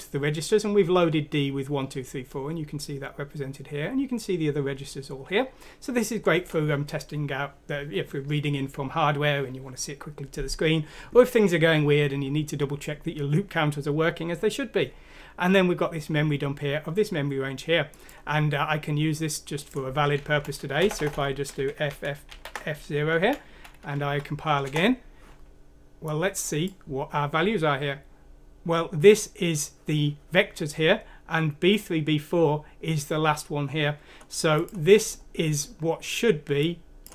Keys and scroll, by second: 20.3 Right, 21.0-22.3 typing, 23.2 Escape, 24.1 Escape, 24.1 F6, 24.1 BackSpace, 24.1 f, 24.6 Return.